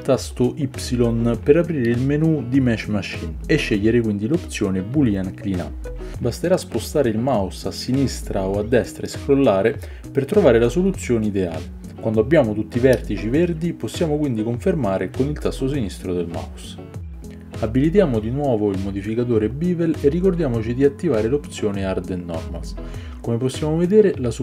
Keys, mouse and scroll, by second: 1.7-22.0 shift+middle drag, 18.4-19.8 drag.